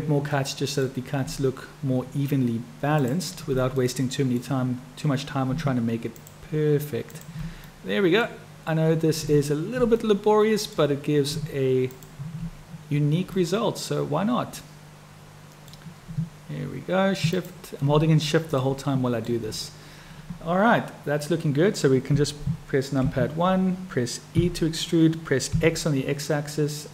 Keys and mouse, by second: 0.4 middle click, 2.9 shift+click, 3.9 middle click, 6.1 shift+click, 7.7 click, 10.0 click, 11.8 shift+click, 13.4-15.7 middle drag, 17.2 shift+click, 18.6 middle click, 23.1 KP_1, 24.4 e.